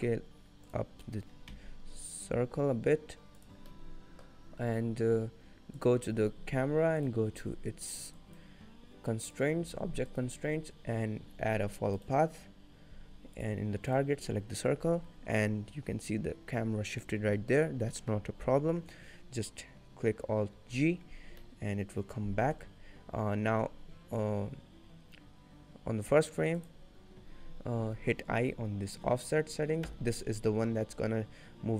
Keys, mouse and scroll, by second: 0.0 middle click, 0.7 click, 1.6 s, 3.7 scroll up 1, 5.9 click, 7.1 click, 9.4 click, 10.2 click, 13.5 click, 14.6-15.1 scroll down 3, 14.8-15.4 scroll up 2, 15.4-16.4 scroll down 4, 17.1 scroll up 2, 17.5 shift+middle click, 18.0-18.7 shift+scroll up 4, 18.0 shift+middle click, 20.6 alt+g, 21.5 middle click, 26.7 click.